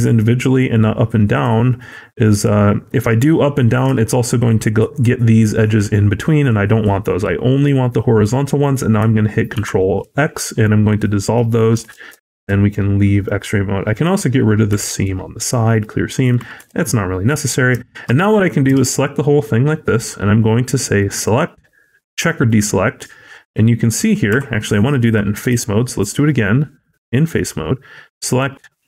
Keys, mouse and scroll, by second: 3.4 shift+middle click, 3.7-4.1 shift+scroll up 3, 10.5 middle click, 10.9-11.3 scroll down 4, 11.7 alt+z, 11.7 scroll down 1, 12.1 shift+middle click, 12.6 middle click, 13.3 scroll up 1, 13.9 click, 14.7 ctrl+e, 15.9-16.2 scroll down 2, 16.2 middle click, 16.5 a, 16.8 middle click, 17.4 scroll up 2, 17.7 shift+middle click, 18.6 a, 20.9 click, 23.2-23.5 scroll down 2, 23.5 middle click, 23.8-24.2 scroll up 2, 24.2 3, 24.6 middle click, 25.4 a, 28.2 click.